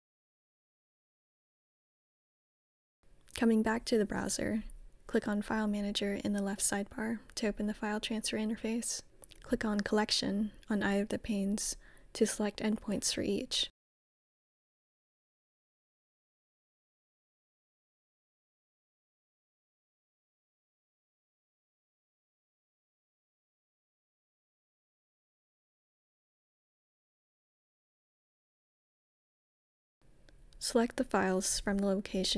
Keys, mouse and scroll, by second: 1.4 click, 2.6 click, 3.3 middle click, 6.1-9.0 drag, 9.9-11.1 drag, 13.8-19.2 drag, 19.6-21.3 drag, 24.8-26.3 drag, 29.6-31.4 drag.